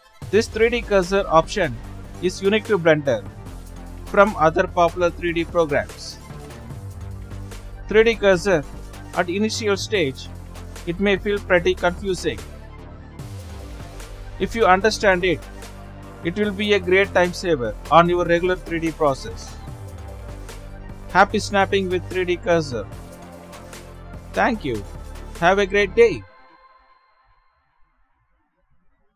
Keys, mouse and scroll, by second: 0.0 click, 0.6 ctrl+z, 1.3 ctrl+z, 2.3-5.4 right drag, 6.3 ctrl+z, 6.8-9.7 right drag, 9.7 ctrl+z, 12.1 click, 13.6-14.4 middle drag, 14.4 click, 18.3-19.3 drag, 19.3-20.4 middle drag, 20.4-21.2 scroll down 6, 21.2-22.2 drag, 22.2 shift+s, 23.9 shift+s.